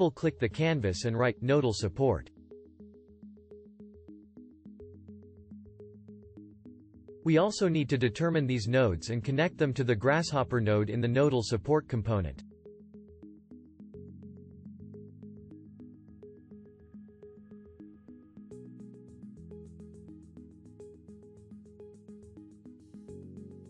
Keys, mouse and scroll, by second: 20.4-23.6 shift+drag.